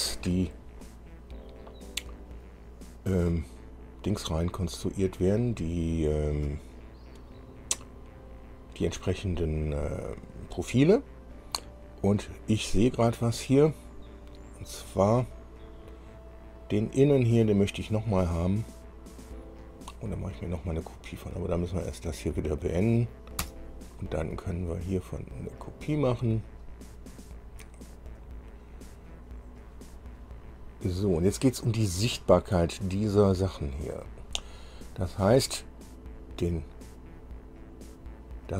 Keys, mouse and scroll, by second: 15.8 click, 17.2 click, 22.9 click, 23.6 Return, 25.2 click, 28.3 click, 30.6 scroll down 2, 31.9 scroll up 2, 37.8-38.1 scroll down 2.